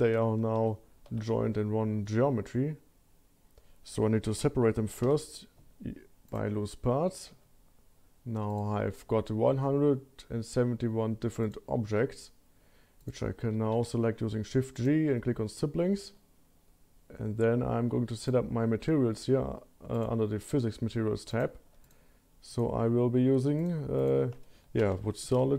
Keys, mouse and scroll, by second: 0.2 Tab, 0.6 3, 1.1 a, 5.0 p, 7.4 Tab, 8.5 click, 11.4 click, 13.0 drag, 13.7 shift+g, 18.2-20.0 drag, 21.3 click, 21.8-23.6 drag, 24.0-25.5 drag, 24.9 o.